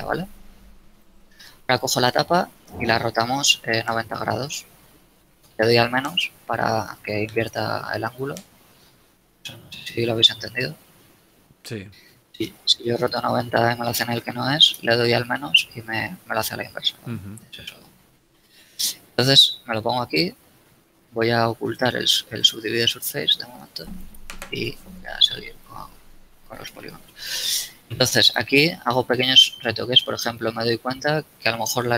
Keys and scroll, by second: 1.0 g, 3.7 r, 4.0 0, 5.3 -, 6.0 Return, 11.3 ctrl+z, 12.3 r, 13.0 0, 14.7 -, 15.8 Return, 19.0 z, 26.0 ctrl+a, 27.4 b, 31.3 a.